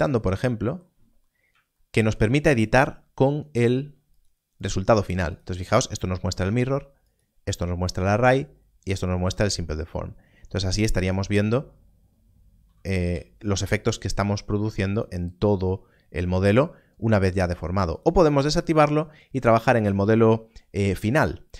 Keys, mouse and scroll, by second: 1.2 scroll up 1, 4.1 click, 10.2 scroll up 1, 12.9-14.8 scroll, 14.8 g, 14.9 click, 17.9 click.